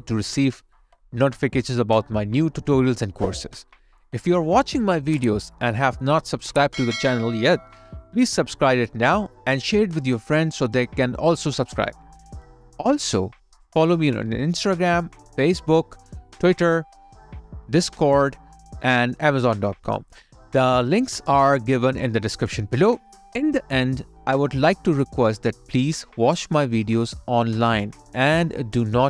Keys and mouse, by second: 8.1 f, 11.3 alt+click, 15.0 alt+right click, 19.2 alt+click, 22.0 alt+right click, 23.5 alt+middle click, 26.3 alt+right click.